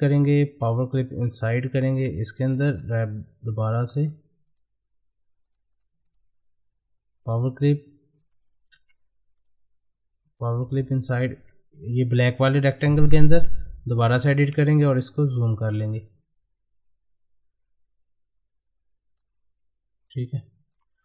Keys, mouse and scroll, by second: 1.2 click, 3.0 right click, 5.4 click, 6.1 right click, 7.2 click, 8.7 ctrl+z, 9.4 right click, 10.4-21.0 drag.